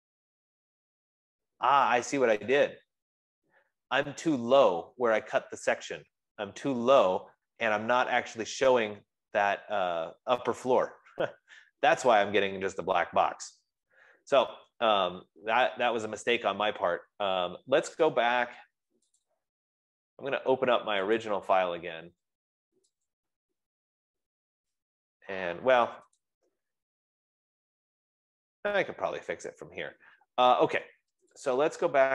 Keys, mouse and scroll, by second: 4.1 right click, 4.1-4.8 scroll, 5.2 click, 7.8 middle click, 8.8 right click, 9.5 F15, 15.5-16.3 scroll, 17.0 scroll, 17.1 Escape, 17.6 Escape, 18.2 Escape, 19.7 click, 21.7 click, 23.6 click, 24.4 middle click, 28.5-31.7 drag, 31.9-32.1 drag.